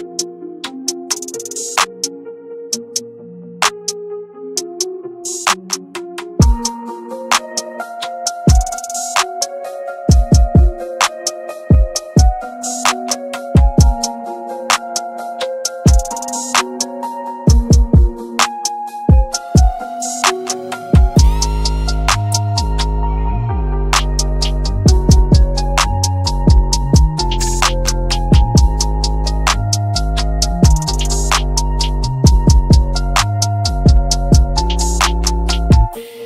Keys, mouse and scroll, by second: 0.6-2.1 scroll up 1, 3.0 click, 3.7 q, 4.0 click, 7.3-8.5 scroll down 1, 8.5 click, 10.7 f, 11.7 ctrl+click, 12.1 ctrl+right click, 13.2 click, 13.7-14.1 scroll down 1, 14.1 scroll up 1, 14.5 click, 15.1 scroll down 1, 15.5 shift+click, 15.7 c, 16.1 click, 16.8-17.2 scroll down 1, 17.2-20.5 drag, 20.5 scroll up 1, 21.2 scroll down 1, 22.0-24.5 shift+drag, 25.7-26.3 scroll down 1, 27.0-29.2 drag, 29.2 scroll up 1, 30.1 shift+Page_Up, 31.2-34.1 shift+drag, 34.1 shift+click, 35.0 scroll down 1, 35.6-36.2 drag.